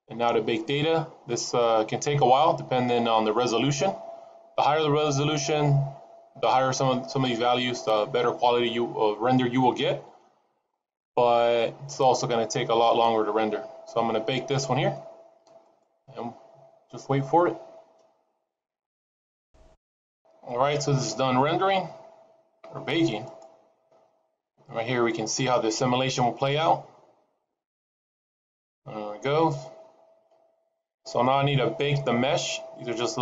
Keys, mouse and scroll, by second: 0.2 scroll down 2, 0.8 scroll down 3, 3.9-6.2 scroll down 1, 7.7-8.3 scroll down 2, 8.3-9.6 scroll down 3, 9.6-10.2 scroll down 2, 10.2-10.9 scroll down 5, 10.6-12.8 scroll up 16, 12.8-13.3 scroll down 1, 13.3-14.5 scroll down 2, 14.5-15.5 scroll down 1, 15.5 click, 23.1 click, 29.5 middle click.